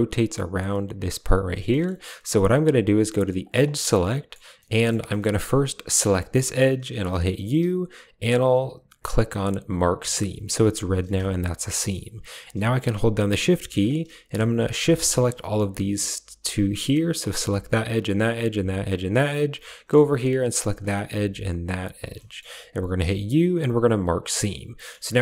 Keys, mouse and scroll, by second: 1.6 click, 3.3 click, 3.7 middle click, 4.5 middle click, 5.0 shift+click, 5.2 middle click, 6.0 click, 7.3 u, 11.2 a, 12.8 click, 13.7 shift+click, 14.0 click, 14.1 middle click, 15.2 shift+click, 16.3 shift+click, 19.1 middle click, 20.7 shift+click, 21.6 shift+click, 22.1 click, 22.9 u, 24.3 middle click.